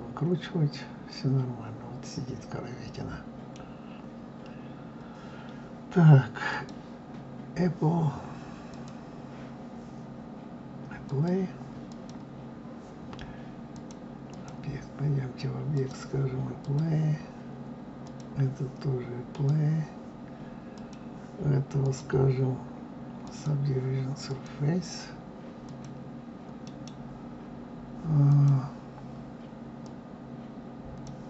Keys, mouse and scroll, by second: 3.6-4.8 scroll down 1, 4.8-5.4 scroll up 1, 6.5-8.8 drag, 11.0 click, 13.7-15.8 drag, 16.6 click, 18.0 click, 19.3 drag, 20.7 click, 21.8-24.4 drag, 25.6 click, 26.6-29.6 right drag, 29.8-31.2 drag.